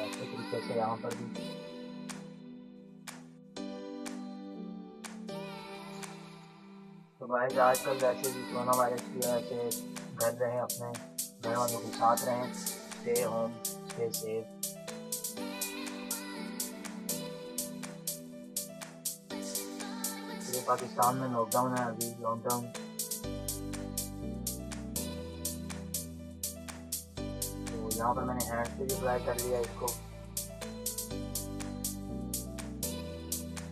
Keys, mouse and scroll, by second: 2.6 ], 2.8 ], 2.9 ], 3.1-6.4 drag, 6.4 [, 6.7-9.4 drag, 9.4 ], 9.7-11.6 drag, 11.6 [, 12.1-13.6 drag, 12.1 [, 13.6 ], 13.7 ], 14.1-15.3 drag, 15.3-15.8 [, 15.9-18.0 drag, 18.0 space, 18.1 click, 18.3 ], 18.6 click, 19.5 typing, 19.7 click, 21.3 typing, 21.6-25.1 drag, 25.1 ], 25.4 ], 25.6 click, 26.7 ctrl+-, 26.9 ctrl+-, 27.0 ctrl+space, 27.1 click, 27.5 space, 27.9 click, 28.4 [, 28.7-33.7 drag.